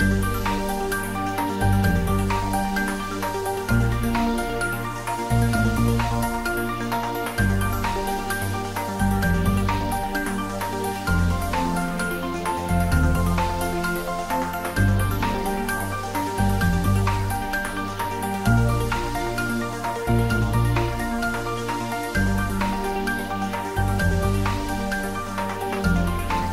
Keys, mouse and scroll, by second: 0.0-2.9 typing, 1.9 click, 5.2 click, 5.6 ctrl+s, 5.9-7.1 middle drag, 7.1 ctrl+middle click, 7.6 middle click, 8.3 ctrl+s, 8.7-10.4 ctrl+middle drag, 11.1 click, 13.0-15.8 typing, 16.0 click, 16.2 ctrl+s, 16.6 click, 17.0 ctrl+s, 17.7 click, 18.0-19.8 typing, 19.3 click, 21.2 x, 21.2 click, 22.0 ctrl+s, 22.4 shift+middle click, 23.3-24.7 ctrl+middle drag, 24.7 ctrl+s.